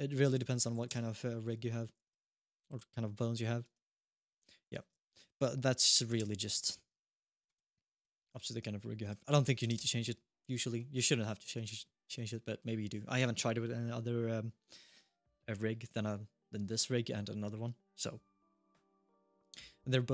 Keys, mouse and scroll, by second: 0.5 5, 1.2-1.8 scroll down 1, 1.8 click, 2.2 g, 3.6 scroll up 2, 3.9 alt+g, 3.9 click, 3.9 scroll down 1, 4.0 click, 4.2 click, 6.8 shift+middle click, 7.1 click, 7.2 click, 7.7 click, 8.8 click, 10.1-10.8 scroll down 2, 10.4 middle click, 10.9 middle click, 11.3 click, 11.9-12.2 scroll up 1, 12.2 middle click, 12.5-13.1 scroll down 1, 19.2 middle click.